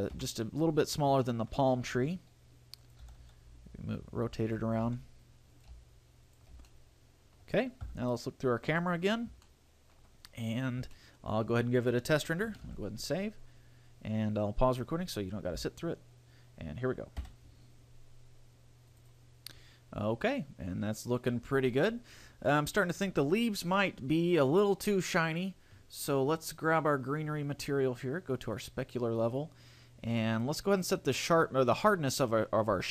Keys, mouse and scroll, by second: 0.4 KP_1, 1.0-1.4 scroll up 2, 1.4 shift+middle click, 2.2 g, 3.1 click, 3.2 r, 4.8 click, 5.1 r, 5.9 click, 6.0 g, 6.6 click, 6.8 a, 6.9 middle click, 8.0 KP_0, 9.0-9.6 scroll down 5, 9.7 shift+middle click, 10.4 scroll up 1, 11.2 shift+middle click, 12.8 ctrl+s.